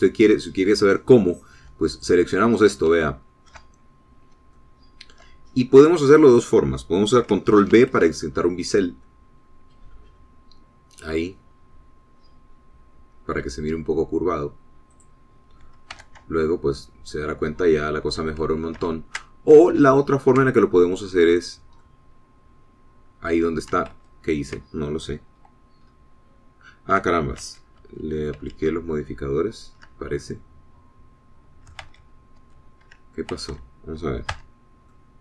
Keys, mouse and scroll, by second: 0.7 middle click, 3.1 click, 4.1 shift+middle click, 4.9-5.4 shift+scroll up 4, 5.7 shift+middle click, 6.7 shift+scroll down 3, 8.9 ctrl+b, 9.7-10.9 drag, 12.4 scroll up 2, 13.1 scroll up 2, 14.1 scroll up 2, 16.2 click, 17.2 Tab, 18.3-19.8 drag, 20.0 ctrl+z, 20.8 ctrl+z, 20.9 ctrl+<, 22.6 scroll down 2, 22.9-24.9 drag, 25.2 ctrl+z, 26.3-26.7 scroll down 2, 27.0-28.1 scroll up 2, 28.6 ctrl+z, 31.1-31.4 ctrl+scroll down 2, 31.4-32.9 ctrl+middle drag, 32.9 ctrl+click, 33.0 ctrl+z.